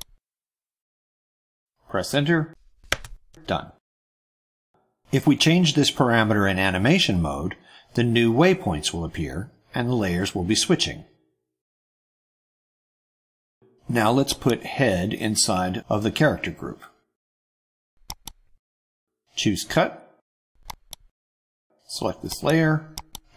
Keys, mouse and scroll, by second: 0.3 click, 1.7 BackSpace, 1.8 1, 2.8 Return, 14.2 click, 18.0 right click, 20.6 click, 22.3 click, 22.9 right click.